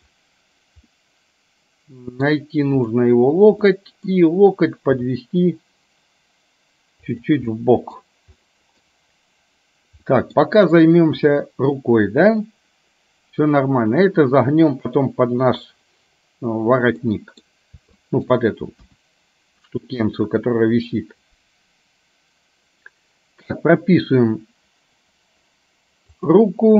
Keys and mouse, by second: 0.9-2.4 middle drag, 3.8 middle click, 5.0 g, 7.7 middle click, 8.4 middle click, 10.2 middle click, 11.2 KP_1, 17.2 middle click, 18.0 shift+middle click, 18.9 KP_1, 26.2 click.